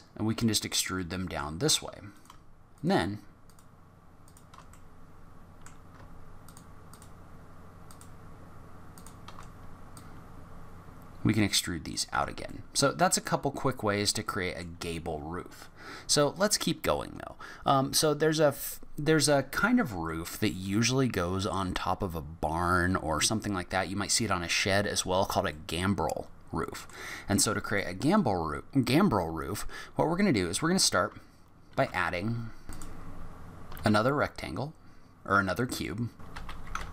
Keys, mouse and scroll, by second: 1.0 middle click, 2.1 click, 2.8 shift+click, 3.4 shift+click, 4.3 click, 4.7 middle click, 6.4 shift+click, 6.9 shift+click, 7.9 shift+click, 8.9 shift+click, 9.9 click, 12.1 Tab, 12.5 middle click, 13.4-14.1 scroll down 7, 14.2 middle click, 20.1 middle click, 24.8 scroll up 1, 25.5 middle click, 27.4 middle click, 28.0 click, 31.7 ctrl+a, 32.7 click, 33.0 click, 33.3 click, 33.7 shift+a, 36.2 g, 36.4 g, 36.6 s, 36.8 g.